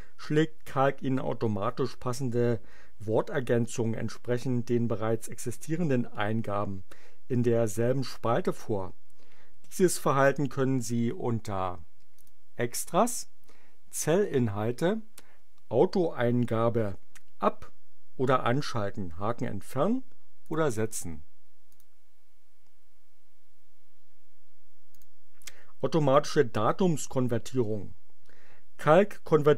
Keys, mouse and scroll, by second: 12.1 click, 20.4 click, 21.7 click, 24.9 click.